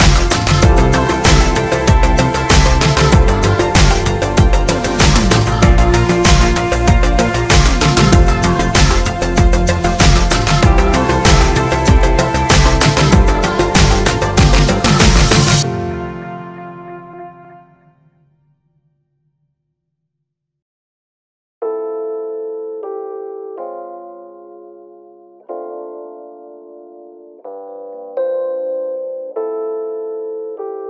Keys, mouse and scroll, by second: 0.2-5.9 shift+middle drag, 1.0 KP_9, 2.9-3.3 scroll up 2, 3.3 KP_9, 5.9 KP_1, 6.5 click, 6.8 a, 8.4 click, 8.5 click, 9.1-9.6 drag, 9.2 KP_Enter, 9.9 click, 10.9 click, 10.9 KP_Enter, 12.3-12.6 drag, 12.3 KP_Enter, 13.2 click, 13.7 click, 13.8 KP_Enter, 14.5-23.0 shift+middle drag, 15.6 KP_7, 16.3-16.7 scroll up 2, 16.9 scroll up 2, 23.0 click, 23.4 e, 24.1 click, 25.4 e, 26.4 ctrl+z, 27.0 e, 28.8 click, 29.1 shift+click, 29.3 f, 30.6 click.